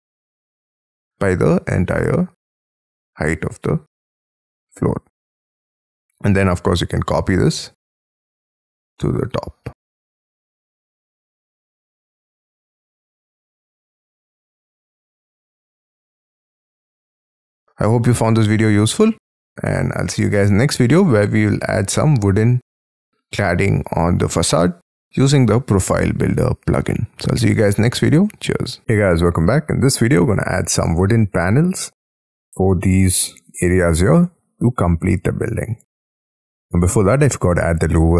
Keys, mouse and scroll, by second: 0.7 space, 0.8-1.8 scroll down 25, 3.5-3.9 scroll down 13, 4.3 middle click, 6.7 scroll up 6, 7.7-8.6 scroll up 12, 9.6-10.0 scroll down 14, 10.4 shift+middle click, 10.9-12.1 scroll up 18, 12.5 shift+click, 12.8 shift+scroll down 1, 13.2-13.6 scroll up 10, 16.3 shift+click, 16.5 space, 16.6-18.7 scroll down 49, 17.5 Escape, 17.9 Escape, 18.9 middle click, 20.4-21.0 scroll down 15, 29.1 middle click, 31.3 middle click, 33.5 middle click, 34.2 middle click, 34.8 middle click, 36.2 middle click, 36.3-37.1 scroll up 18, 37.3 scroll down 6.